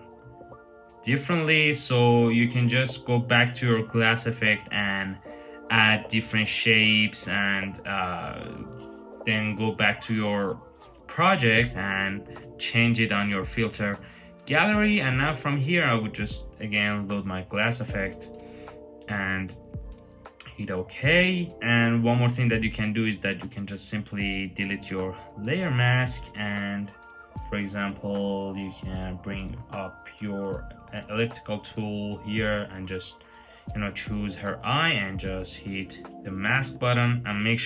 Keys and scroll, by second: 6.5 super+z, 10.6 v, 36.3 Return.